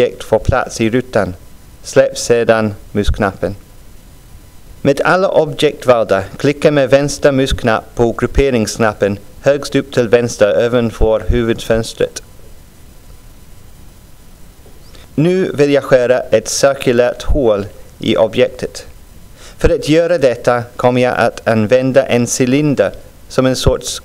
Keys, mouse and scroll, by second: 9.9 click, 17.0 click.